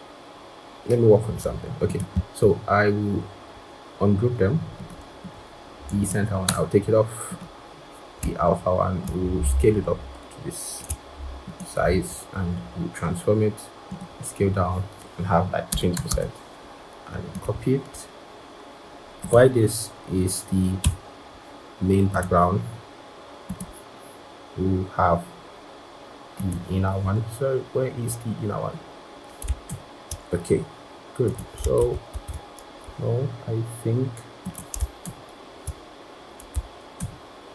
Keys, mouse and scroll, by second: 2.1 right click, 6.3 BackSpace, 8.9 shift+click, 11.7 right click, 15.6-16.7 typing, 15.9 Tab, 20.7 typing, 29.9 ctrl+[, 31.6 ctrl+z, 32.0 ctrl+z, 35.5 ctrl+[, 36.8 ctrl+[.